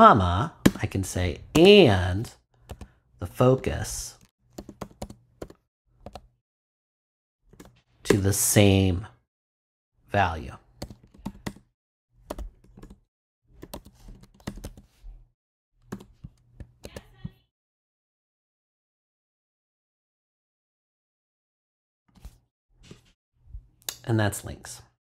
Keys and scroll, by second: 0.6 ,, 2.7-6.0 typing, 7.5 shift+[, 8.0 shift+Return, 8.6 Return, 10.8 c, 12.4-14.6 typing, 15.9 ;, 16.6 super+;, 16.8 super+s.